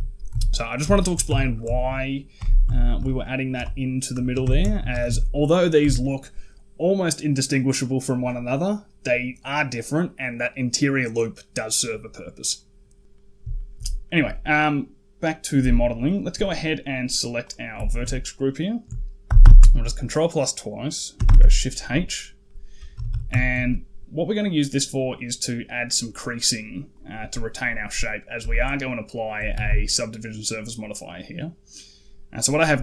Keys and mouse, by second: 0.1 Tab, 0.8 shift+middle click, 1.1 Tab, 1.5 shift+middle click, 2.2 g, 4.0 shift+click, 4.2 Tab, 4.5 shift+click, 4.7 a, 4.9 a, 5.6 Tab, 13.0 middle click, 13.4 shift+middle click, 17.7 shift+click, 19.1 ctrl+KP_Add, 19.3 ctrl+KP_Add, 21.1 shift+h, 22.3 middle click, 22.8 a, 22.9 a, 23.3 shift+middle click, 26.8 click, 27.7 click, 28.3 shift+click, 29.1 shift+middle click, 29.4 a, 29.5 a, 29.6 middle click.